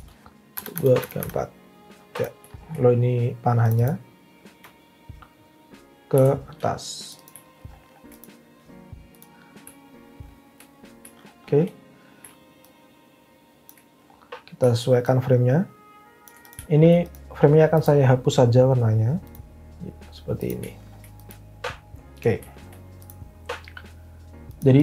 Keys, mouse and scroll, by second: 0.5 Down, 0.7 Down, 1.0 Down, 1.2 Down, 6.1 v.